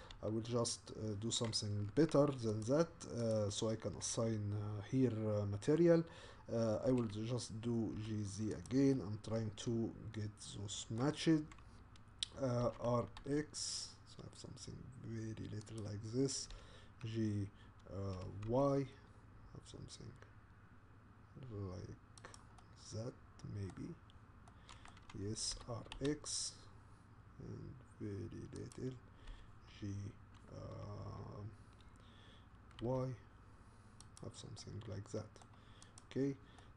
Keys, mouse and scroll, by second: 0.0 g, 2.6 click, 3.3 click, 6.9 g, 8.9-11.3 middle drag, 11.3-12.6 scroll up 1, 12.6 r, 16.5 g, 22.6-23.9 middle drag, 23.9-24.5 scroll down 2, 24.5-25.5 middle drag, 25.5 r, 29.3 g, 34.6-35.6 middle drag, 35.6-36.0 scroll up 1, 36.0 click, 36.6-36.7 middle drag.